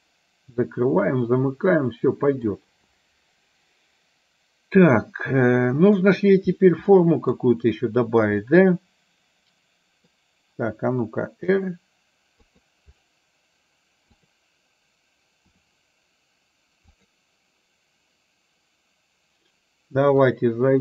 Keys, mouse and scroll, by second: 5.0-6.1 middle drag, 6.9 middle click, 8.6-10.1 middle drag, 11.5 r, 14.2 click, 15.6 r, 20.5-20.8 drag.